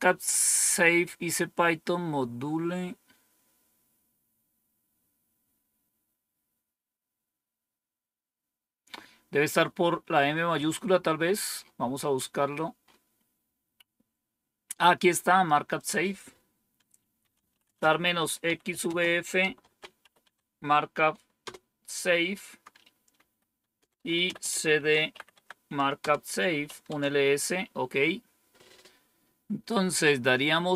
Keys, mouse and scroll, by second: 14.7 click, 15.7 click, 16.9-21.3 typing, 24.1-26.9 typing, 29.5 scroll up 1.